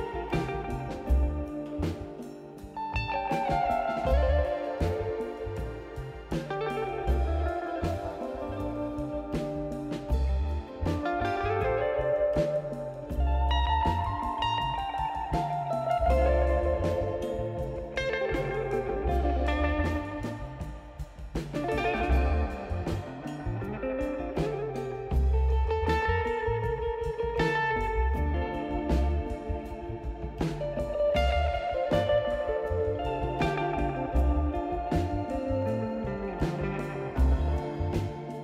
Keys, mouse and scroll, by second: 3.5 click, 6.3 right click, 7.9 click, 8.1 click, 12.3 scroll up 2, 17.3-17.7 scroll down 3, 17.7 middle click, 18.2-19.6 right drag, 20.2 middle click, 20.5 scroll down 2, 20.8 right click, 24.7-25.3 right drag, 26.6 click, 26.7-35.7 drag, 28.6 0, 29.5 Return.